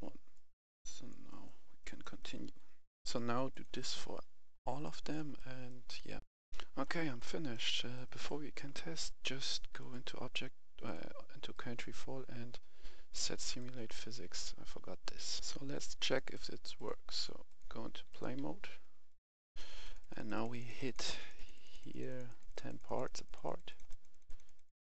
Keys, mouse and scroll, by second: 0.3 click, 1.3 right click, 1.5 scroll down 1, 1.8 right click, 2.5-2.8 scroll up 1, 2.8 click, 4.4-4.7 scroll down 1, 4.7 right click, 6.1 click, 6.2 F10, 6.5 right click, 6.9 scroll down 1, 7.2 right click, 8.6-9.7 scroll up 1, 9.7 click, 11.4 right click, 12.0 scroll up 1, 13.4 click, 15.4 F10, 16.2 right click, 16.8 click, 18.9-22.5 drag, 18.9 s, 18.9 s, 19.0 s, 19.0 s.